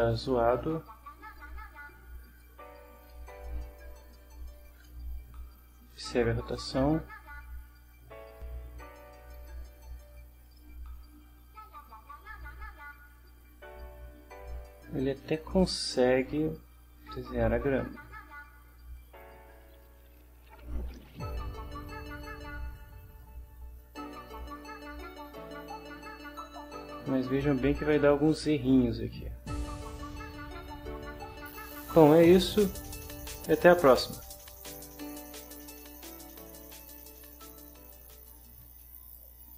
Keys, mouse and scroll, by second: 1.4-2.6 drag, 3.4 middle click, 4.0 shift+click, 4.0 shift+middle click, 4.1 shift+click, 4.2 shift+middle click, 8.3 click, 9.3 click, 10.4 click, 11.8-13.3 right drag, 13.4-22.9 right drag, 23.2 middle click, 24.1-24.8 scroll up 2, 25.0-26.6 middle drag, 26.6-29.2 drag, 29.5-30.3 scroll down 3, 31.3 shift+middle click, 35.0 click, 36.1 click, 37.2 click, 39.5 click.